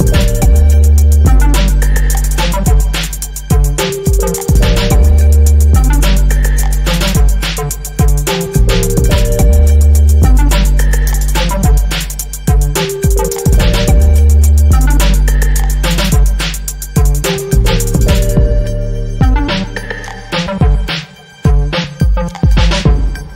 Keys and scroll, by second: 4.8 ctrl+t, 13.6 Up.